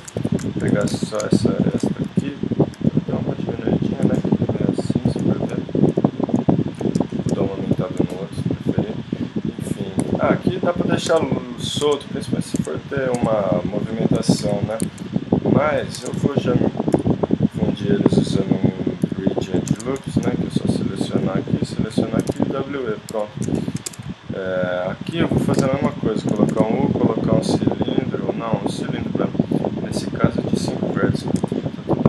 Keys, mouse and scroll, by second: 0.0 ctrl+Tab, 0.9 z, 1.3-3.4 drag, 2.1 z, 2.7 s, 4.2 click, 9.9 middle click, 10.8 click, 11.1 Tab, 11.8 Tab, 12.6 Tab, 13.2 Tab, 14.2 g, 15.9 ctrl+Tab, 16.3-18.2 drag, 16.9 x, 19.7 ctrl+Tab, 20.5 click, 22.2 w, 23.1 Tab, 23.9 Tab, 25.6 shift+s, 26.5 shift+a, 31.2 s.